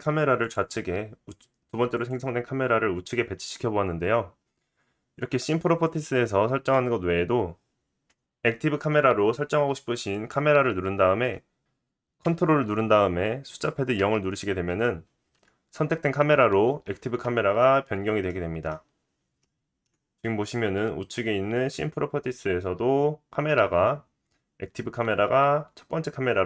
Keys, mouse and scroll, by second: 0.4 click, 0.5-1.9 middle drag, 1.9 click, 2.1-10.1 middle drag, 10.1 click, 10.3-19.8 middle drag, 14.0 ctrl+KP_0, 18.8-19.4 scroll down 2, 24.0 scroll down 2.